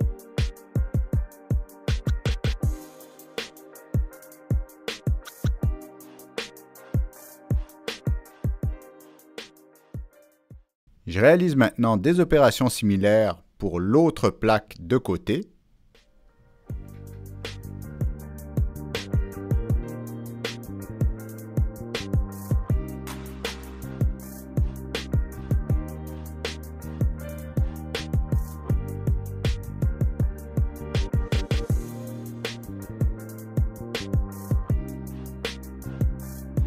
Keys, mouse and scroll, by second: 0.3 click, 0.7 middle click, 2.0 click, 2.6 click, 2.6 middle click, 2.9 click, 3.6 click, 4.5 click, 4.7 click, 5.1 click, 6.9 click, 8.1 Down, 8.3 Return, 9.7 click, 14.0 click, 16.5 click, 17.1 middle click, 18.0 ctrl+middle click, 18.5 click, 19.9 click, 20.3 click, 20.5 right click, 21.4 right click, 22.1 click, 22.2 right click, 23.0 middle click, 24.1 click, 24.6 ctrl+click, 26.1 ctrl+click, 26.8 ctrl+click, 27.3 ctrl+click, 28.4 click, 29.1 ctrl+a, 30.0-30.5 drag, 30.5 ctrl+a, 30.9 click, 31.2 ctrl+a, 31.5 click, 32.7 click, 34.6 click, 35.0 click, 36.3 click.